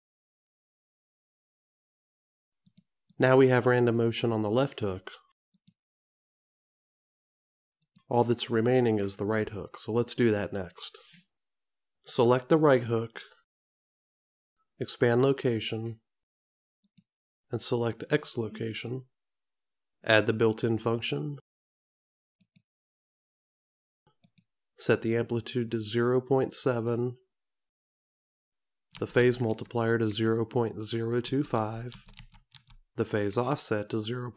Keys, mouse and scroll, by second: 3.3 click, 5.8 click, 8.1 click, 12.9 click, 17.0 click, 18.9 click, 22.6 click, 26.8 click.